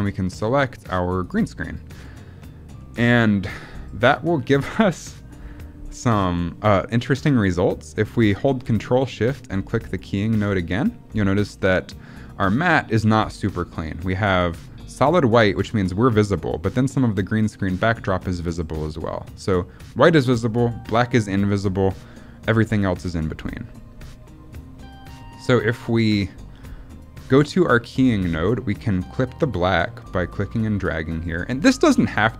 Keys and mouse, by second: 2.8 middle click, 7.8 middle click, 9.8 ctrl+shift+click, 13.5 middle click, 18.0 middle click, 18.4 middle click, 23.7 middle click, 27.5 middle click, 30.2-32.3 drag.